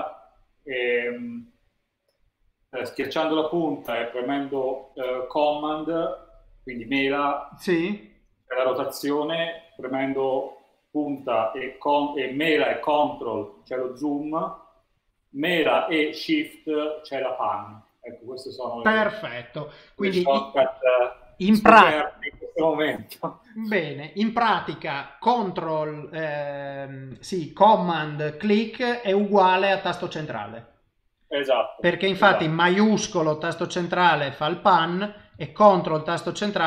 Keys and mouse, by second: 33.1 shift+middle click, 35.4 ctrl+middle click.